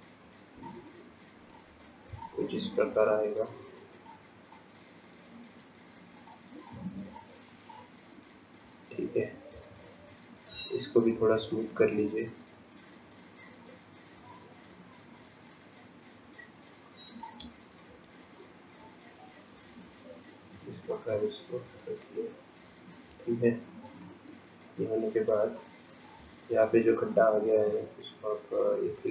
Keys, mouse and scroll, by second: 1.9 click, 2.5 click, 4.6 click, 6.7 click, 8.6 scroll up 2, 9.8 shift+middle click, 10.7-11.7 scroll up 2, 12.8 scroll up 1, 13.1 shift+click, 18.4 shift+click, 23.8 scroll down 7, 24.6-25.6 scroll up 5, 25.6 shift+middle click, 26.6 scroll up 2.